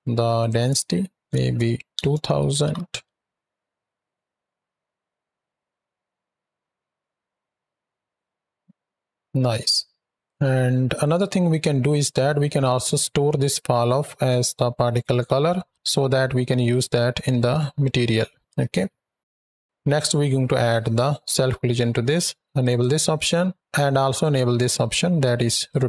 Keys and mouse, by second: 0.2-1.9 drag, 2.4 shift+Right, 2.5 shift+Left, 2.9 space, 9.1 space, 9.8 drag, 10.8 click, 12.5 click, 19.3 click, 22.5 click, 25.6 click.